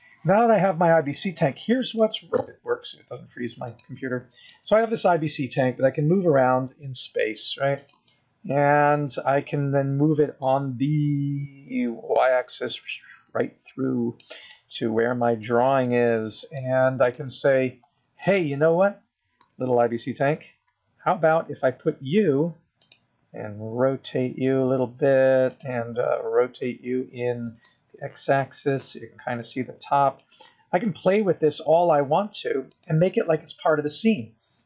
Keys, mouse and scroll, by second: 1.4 click, 1.8 middle click, 5.0 click, 6.1 click, 6.8 scroll down 1, 6.9 middle click, 8.4 g, 10.5 middle click, 12.6 g, 16.9 middle click, 18.0 scroll up 4, 19.0 middle click, 20.2 KP_0, 21.3-22.0 scroll up 3, 22.6 s, 26.0 r, 28.8 r, 33.8 g.